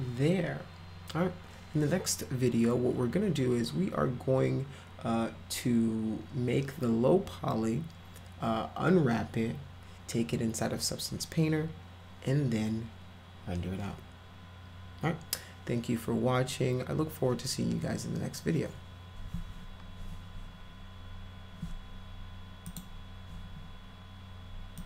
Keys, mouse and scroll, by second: 22.7 click.